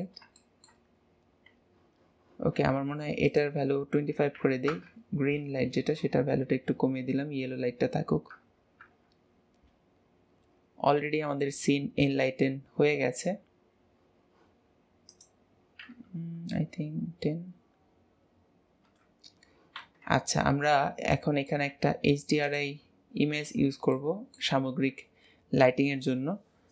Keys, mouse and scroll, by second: 3.3-6.3 drag, 8.9 KP_0, 15.1-18.2 drag, 21.1 middle click, 21.7 z, 23.5 ctrl+s, 23.9-26.7 middle drag.